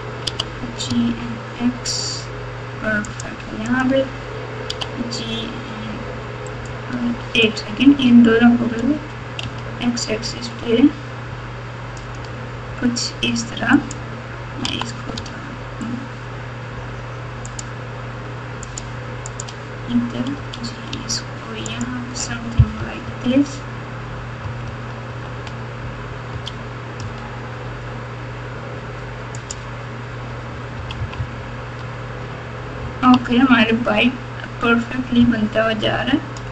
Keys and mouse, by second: 0.2 g, 3.7 click, 4.6 g, 7.4 shift+click, 8.6 g, 13.7 click, 14.6 g, 18.7 click, 19.3 click, 20.3 g, 22.7 KP_4, 23.0 KP_4, 23.2 KP_4, 24.4 KP_4, 24.6 KP_4, 24.8 KP_4, 25.0 KP_4, 26.3 g, 29.4-31.8 typing, 33.1 Tab.